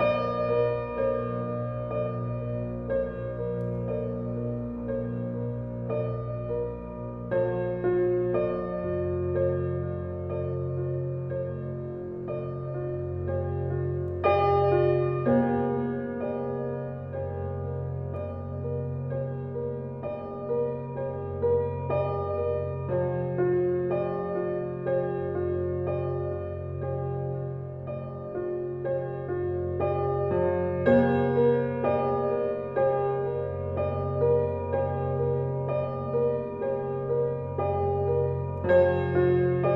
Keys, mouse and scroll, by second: 0.6 shift+middle click, 1.5 shift+click, 2.3 ctrl+drag, 3.2-3.8 shift+middle drag, 3.8 g, 7.2 click, 8.8 click, 9.6 click, 14.9 click, 16.4-16.8 scroll down 3, 18.2 click, 18.6 click, 19.3 click, 22.3 click, 23.8 click, 24.9-25.8 drag, 26.9 click, 27.5 drag, 28.1 click, 28.7-30.3 drag, 31.7 click, 32.5 click, 33.8 click, 34.4 s, 38.1 g, 39.5 click.